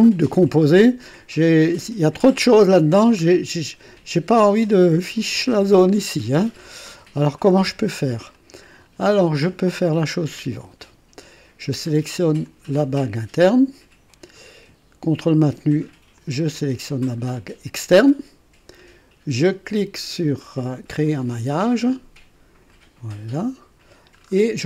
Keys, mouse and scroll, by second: 2.4-2.7 scroll up 1, 2.7-3.2 scroll down 1, 8.3-8.9 drag, 10.8 click, 12.4 click, 16.2 ctrl+click, 21.0 click, 22.6 click, 24.1-24.5 scroll down 2.